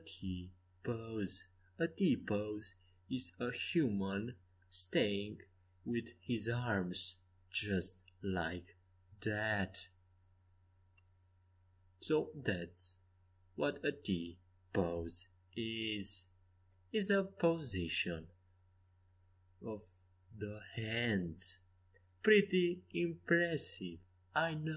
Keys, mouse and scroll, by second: 0.2 ctrl+z, 0.6 ctrl+z, 1.1 ctrl+z, 1.7 ctrl+z, 2.2 ctrl+z, 2.9 ctrl+z, 4.1 middle click, 5.0 middle click, 6.6 a, 7.4 c, 10.8 g, 13.1 a, 14.2 c, 17.3 g, 19.1 Escape, 20.1 5, 22.5 g, 24.3 s.